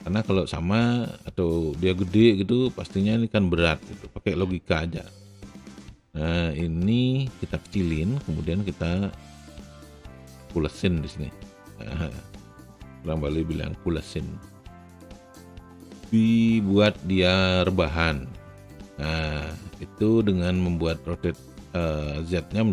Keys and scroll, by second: 5.2 r, 6.3 e.